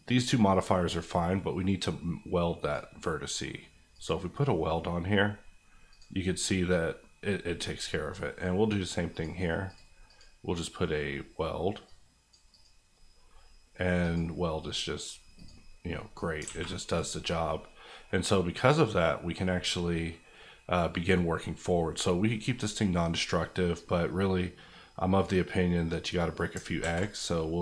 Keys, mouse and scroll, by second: 15.9 middle click, 16.3 scroll down 2, 16.4 alt+a, 16.9 click, 17.2 middle click, 17.6-18.0 scroll up 1, 18.0-25.9 middle drag, 26.8 ctrl+a.